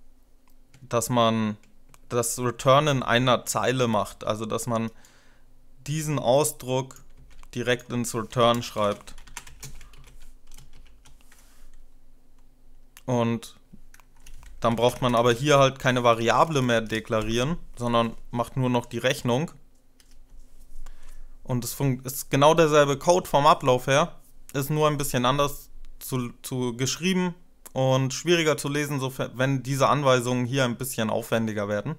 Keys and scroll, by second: 3.5 ctrl+e, 8.5 Return, 8.6 typing, 9.8 ctrl+v, 9.8 space, 10.7 ;, 13.7 typing, 14.5 ctrl+Left, 14.9 ctrl+Left, 15.1 ctrl+Left, 15.2 ctrl+Left, 16.1 BackSpace, 16.5 BackSpace, 19.8 F5, 22.8 space.